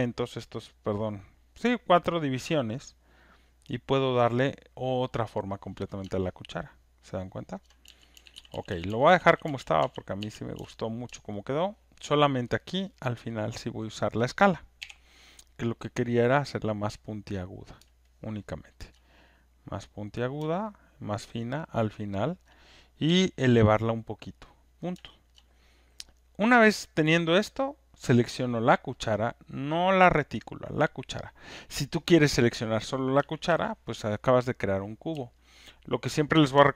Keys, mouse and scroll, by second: 4.0 click, 7.7 click, 7.8-10.5 typing, 11.5 alt+right click, 12.0 alt+click, 12.5 alt+middle click, 12.9 alt+click, 13.1 alt+right click, 13.4 alt+right click, 13.8 alt+middle click, 14.1 alt+click, 17.7 click, 17.8 alt+r, 18.8 alt+click, 20.2 click, 21.1 alt+middle click, 22.4 alt+click, 23.1 alt+click, 23.6 alt+right click, 24.5 click, 24.5 w, 25.3 alt+right click, 26.9 alt+middle click, 26.9 click, 29.0 click, 29.9 click, 30.2 alt+click, 33.5 ctrl+F1, 34.2 click, 36.1 ctrl+click.